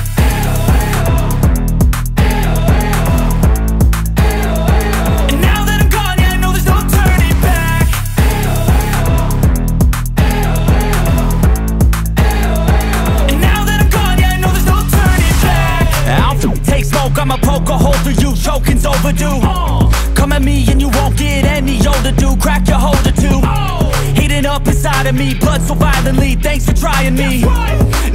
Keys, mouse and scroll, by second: 2.0-2.5 alt+scroll up 1, 4.7 click, 9.7-10.2 scroll down 1, 11.2 alt+scroll up 1, 11.9 scroll up 1, 12.6 scroll down 1, 13.7 space, 14.2-17.7 drag, 17.7 right click, 19.1 click, 20.1-20.7 scroll up 1, 21.6 click.